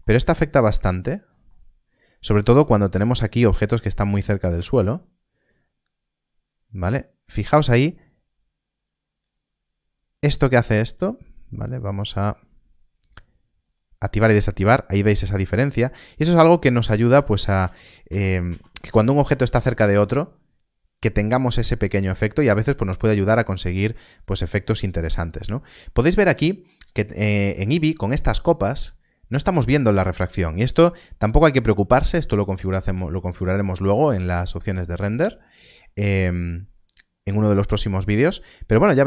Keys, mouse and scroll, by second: 0.2-0.6 scroll up 1, 0.8 shift+middle click, 1.7-2.1 scroll up 1, 2.3 shift+scroll up 1, 4.4 click, 4.5 z, 9.2 click, 12.0 click, 17.0 ctrl+z, 17.5 ctrl+z, 21.7-22.0 scroll down 1, 22.3 shift+middle click, 24.1 shift+middle click, 25.3 shift+middle click, 26.3 shift+middle click, 27.2 shift+middle click, 27.5-28.0 scroll down 1, 32.6 scroll down 1, 33.1 shift+middle click, 33.9-34.2 scroll down 1, 34.5 shift+middle click, 36.0 shift+middle click, 38.6-39.0 scroll up 1.